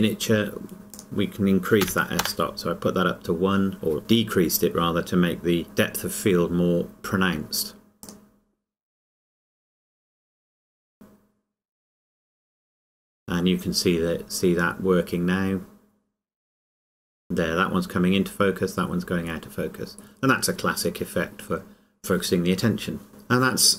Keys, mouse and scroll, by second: 3.7 KP_Enter, 5.6 click, 8.1 click, 21.4 click, 23.1 click.